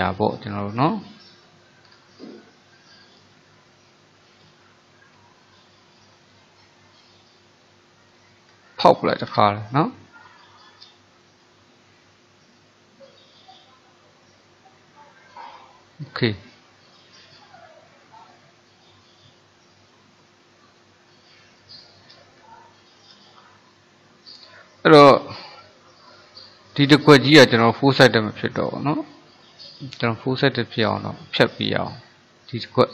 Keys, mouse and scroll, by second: 0.9-1.3 scroll up 3, 1.3 middle click, 2.0 scroll down 2, 2.4-4.5 middle drag, 4.5 click, 5.6 shift+click, 6.4 shift+click, 7.0 shift+click, 7.4 shift+click, 7.7 shift+click, 8.2 shift+click, 9.3 Delete, 11.7-26.8 middle drag, 26.8 click, 31.1 click, 32.5 click.